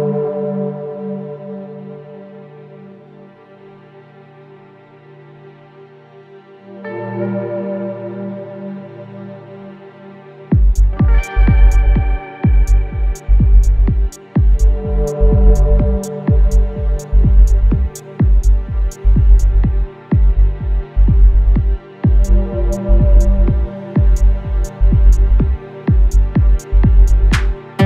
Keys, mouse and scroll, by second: 1.5-4.5 drag, 10.4 ctrl+d, 12.1 ctrl+space, 12.2 ctrl+click, 12.5 ctrl+space, 14.4 click, 17.5 click, 22.6-25.8 drag.